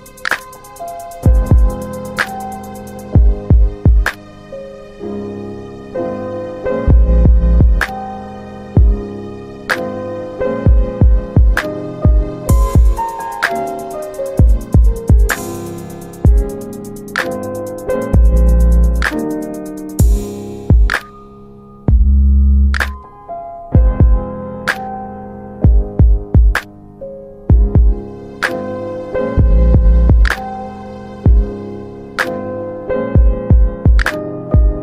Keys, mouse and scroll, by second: 1.3 middle click, 4.3 click, 4.9 click, 6.3 Tab, 6.7-7.0 typing, 8.9 Tab, 9.3-10.5 typing, 11.5 Tab, 12.9 7, 13.5 Return, 15.1 alt+middle click, 16.3 click, 18.8-19.1 typing, 20.0 click, 21.1 alt+middle click, 22.2 click, 22.7 typing, 23.1 Return, 25.0 middle click, 25.6 F4, 26.7 alt+middle click, 27.4 typing, 29.1 click, 30.9 click.